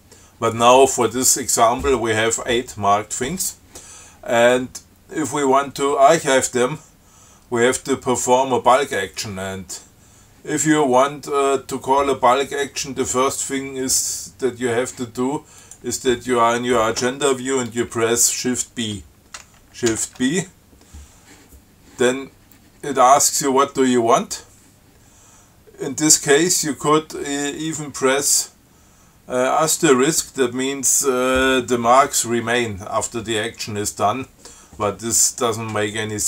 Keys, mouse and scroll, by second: 9.0 click, 15.9 click, 20.2 shift+b.